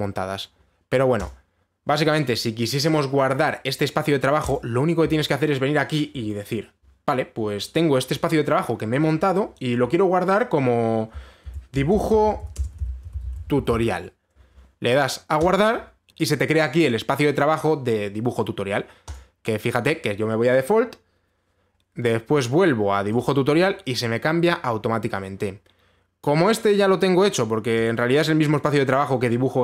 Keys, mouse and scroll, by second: 1.9 click, 5.1 click, 11.8-14.8 typing, 11.8 click, 13.2-14.8 drag, 19.8-22.5 drag, 22.5-22.8 scroll down 1, 23.8 click, 28.4 click.